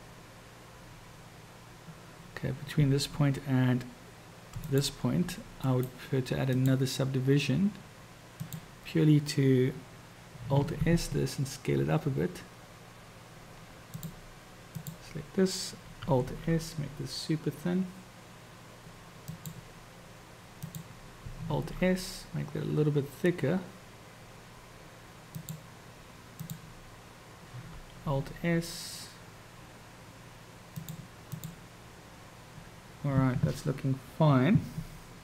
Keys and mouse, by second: 4.6 shift+click, 5.7-6.8 drag, 8.3 click, 10.6 alt+s, 16.2 alt+s, 20.6 click, 21.6 alt+s, 26.3 click, 28.1 alt+s, 31.4 click.